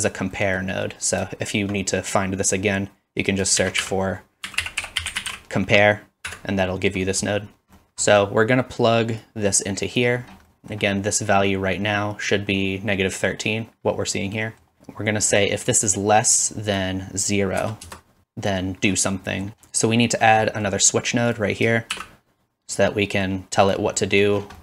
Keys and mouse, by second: 0.7-3.4 drag, 3.4 shift+middle click, 3.8-7.8 middle drag, 3.8 shift+a, 7.8-19.5 drag, 19.5-21.6 middle drag, 19.5 x, 21.6-23.3 shift+drag, 21.9 shift+d, 23.3 middle click.